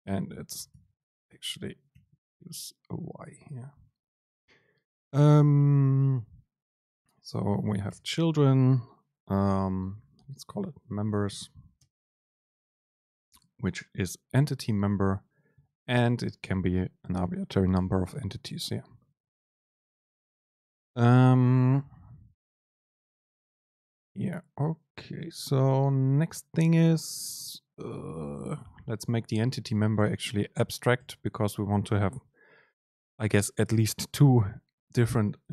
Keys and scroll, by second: 1.3 BackSpace, 8.0 Return, 11.9 super+space, 30.8 Up, 31.1 Home.